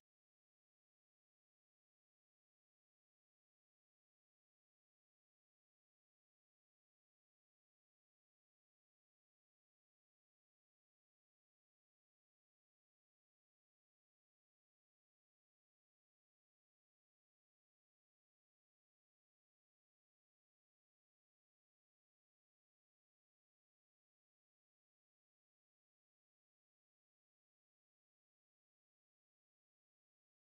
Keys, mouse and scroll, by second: 1.0 click, 1.3 b, 1.9 g, 3.1 click, 3.3 b, 4.1 g, 5.1 click, 5.3 b, 5.9 g, 7.1 click, 7.3 b, 8.0 g, 9.4 click, 9.9 b, 10.9 click, 11.4 b, 12.0 g, 13.3 click, 13.6 b, 14.1 g, 15.1 click, 15.4 b, 16.0 g, 16.9 click, 17.1 b, 17.8 g, 19.0 click, 19.3 b, 19.8 g, 20.9 click, 21.1 b, 21.6 g, 22.6 click, 22.8 b, 23.4 g, 24.3 click, 24.5 b, 25.2 g, 25.9 click, 26.2 b, 26.8 g, 27.9 ctrl+z, 28.1 click, 28.5 b, 29.0 g, 30.3 click.